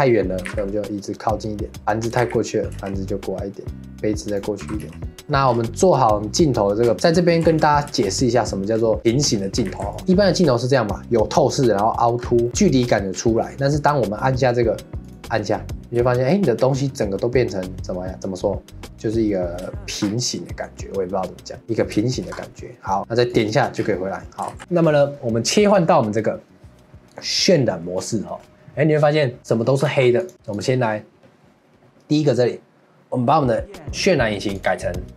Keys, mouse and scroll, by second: 0.4 g, 1.8 click, 2.1 g, 3.9 g, 4.3 click, 4.6 g, 5.2 ctrl+s, 5.5 scroll down 4, 6.8 scroll down 10, 7.0-7.5 shift+middle drag, 7.5 ctrl+s, 7.9-8.7 shift+middle drag, 8.7 scroll down 1, 9.0 middle click, 9.7 ctrl+s, 10.0-12.2 middle drag, 12.2 scroll up 3, 12.5 middle click, 13.1 scroll down 1, 13.4-15.0 middle drag, 15.0 click, 16.0-16.7 shift+middle drag, 16.7-17.1 scroll up 1, 17.1-20.0 middle drag, 20.0 scroll up 3, 20.3-22.3 middle drag, 22.3 scroll up 3, 22.5-23.3 middle drag, 23.3 click, 23.7-24.2 scroll down 6, 24.2 middle drag, 24.5 ctrl+s, 28.0 click, 29.4 click, 29.9 ctrl+s, 30.5 click, 34.5-35.1 drag.